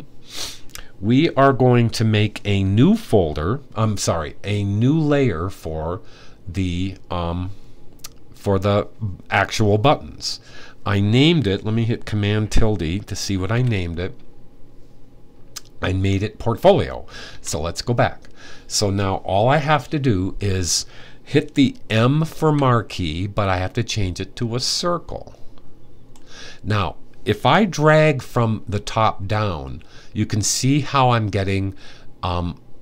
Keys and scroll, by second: 13.2 super+`, 17.0 super+`, 22.0 m.